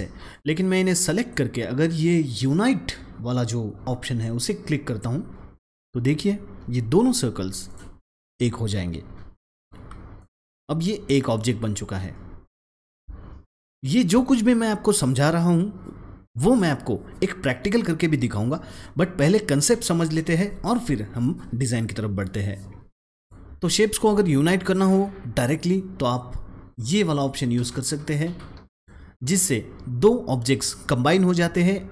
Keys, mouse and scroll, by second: 0.2-6.9 drag, 7.6-13.4 drag, 13.4 ctrl+z, 23.2-28.7 drag, 31.2 drag.